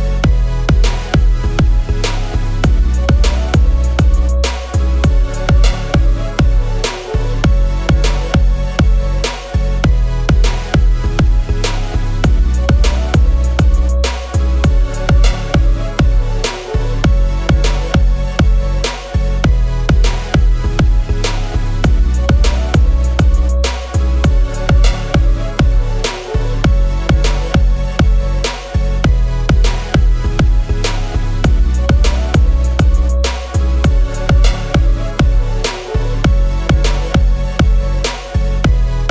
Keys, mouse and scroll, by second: 1.6 shift+Up, 3.2 i, 14.5 typing, 19.9 alt+click, 31.7 i, 36.4-37.7 scroll.